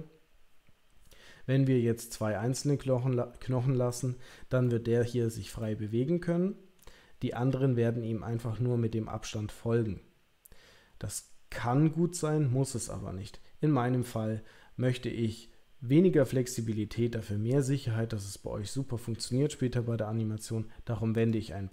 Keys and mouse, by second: 3.9 click, 4.6 middle click, 5.6-6.7 middle drag, 21.1 click.